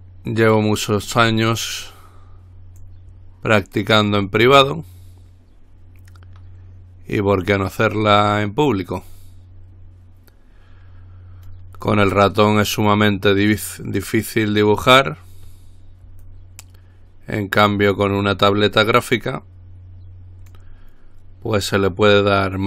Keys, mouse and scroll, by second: 0.7-1.2 scroll up 2, 3.0-8.3 drag, 9.1-12.2 drag, 12.8-15.0 drag, 16.4-21.2 drag, 22.1-22.6 drag.